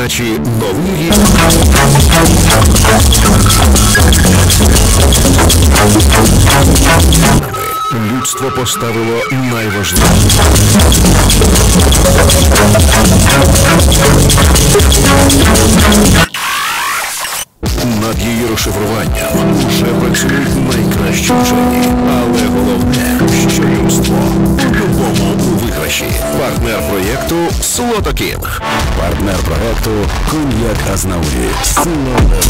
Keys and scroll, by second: 7.3 Page_Down, 16.1 Page_Down, 25.9 Page_Down.